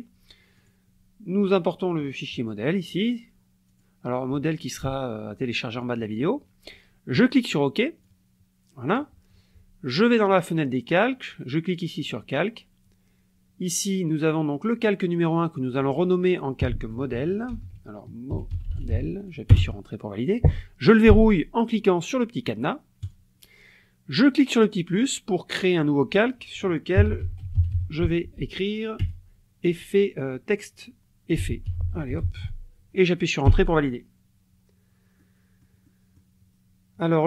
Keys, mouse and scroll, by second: 0.6 click, 3.7 click, 7.2 click, 8.1 click, 10.2 click, 12.0 click, 14.3 click, 15.6 click, 17.1-19.4 typing, 23.0 click, 24.6 click, 26.7-29.0 typing, 31.4 e, 32.2 t, 33.5 Return, 35.2 click.